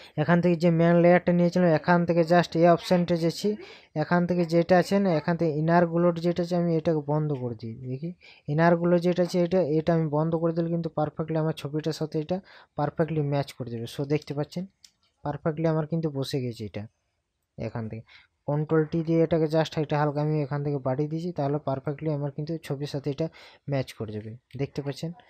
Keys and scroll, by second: 14.3 ctrl+KP_Add, 18.6 ctrl+t, 24.8 ctrl+KP_Subtract.